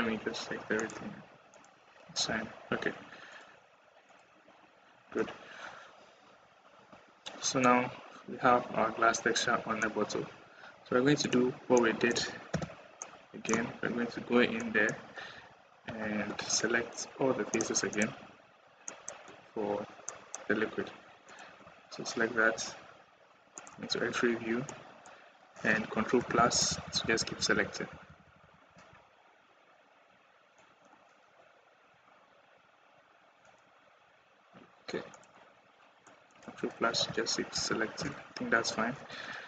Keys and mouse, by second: 1.4 click, 2.2 Tab, 3.9 click, 5.0 Tab, 6.8 Tab, 7.4 middle click, 11.8-12.3 middle drag, 12.3 /, 12.8 middle click, 14.4 middle click, 14.6 click, 15.1 Tab, 15.7 Tab, 17.3 click, 17.7 click, 18.7 click, 20.0 click, 20.1 middle click, 21.4 KP_1, 23.4 middle click, 24.5 middle click, 26.0 ctrl+KP_Add, 26.2 ctrl+KP_Add, 30.4 click, 35.9 middle click, 37.4 ctrl+KP_Add.